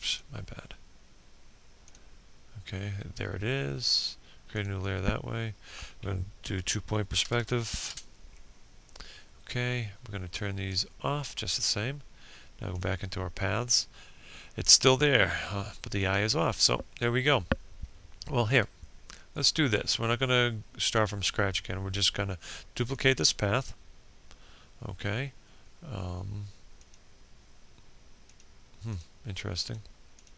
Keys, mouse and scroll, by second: 4.5-5.5 typing, 6.0 Return, 8.7-11.8 drag, 16.5 right click, 20.9-25.8 drag.